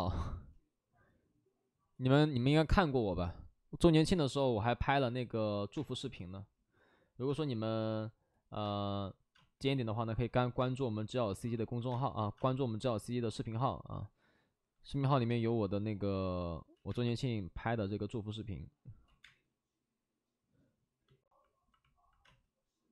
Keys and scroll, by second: 5.7 space, 7.2 space, 8.6 space, 9.3 space, 10.5 space, 11.7 space, 11.8 space, 15.2 space, 16.7 ctrl+z, 16.8 space, 19.1 ctrl+z, 19.1 space, 22.2 space.